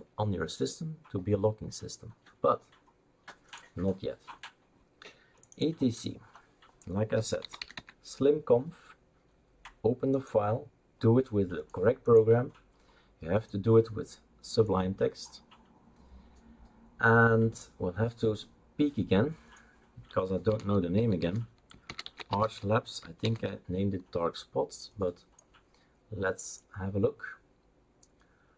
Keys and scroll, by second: 6.9-8.2 typing, 20.5-23.2 typing.